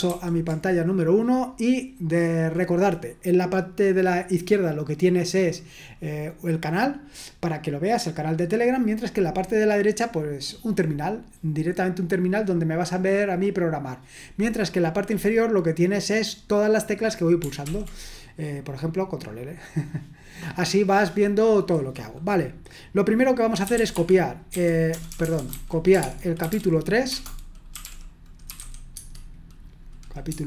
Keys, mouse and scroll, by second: 0.2 super+1, 17.7 ctrl+l, 23.4-29.1 typing, 30.3 Tab.